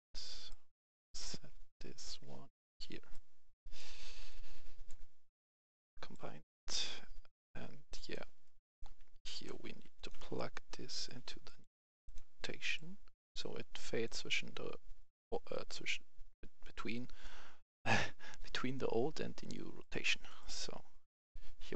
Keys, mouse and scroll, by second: 0.9 right click, 1.3 scroll up 1, 2.0-6.8 drag, 8.3 right click, 9.1 click, 9.6 Delete, 9.9 click, 10.1 Delete, 10.9-20.2 drag.